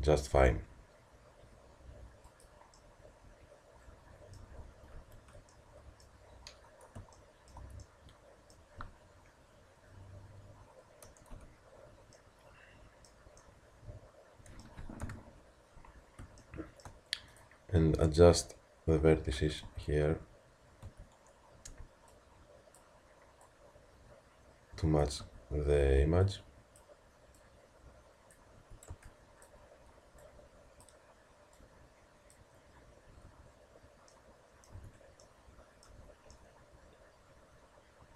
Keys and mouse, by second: 2.8-3.5 middle drag, 5.0 ctrl+z, 11.3 a, 15.0 KP_1, 18.3 Tab, 19.7 z, 20.9 a, 25.0 click, 25.2 a, 27.3-28.6 drag, 28.6 a, 30.2-32.3 drag, 33.1-34.1 drag, 33.1 z, 34.8 a, 35.9 Tab.